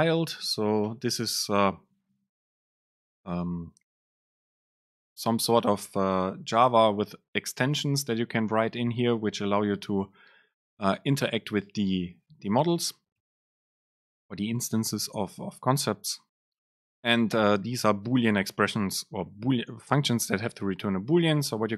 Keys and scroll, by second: 1.0 Return.